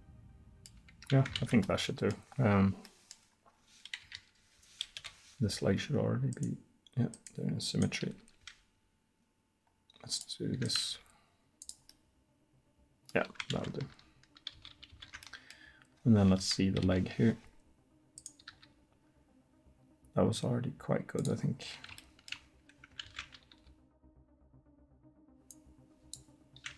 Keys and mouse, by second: 1.4 ctrl+z, 4.1 KP_3, 5.0 KP_1, 8.1 r, 9.4 click, 10.7-13.2 drag, 11.0 r, 13.6 ctrl+z, 14.6 ctrl+z, 15.0 ctrl+z, 16.4 KP_1, 16.9 KP_3, 18.5 r, 23.1 ctrl+z, 25.6 r.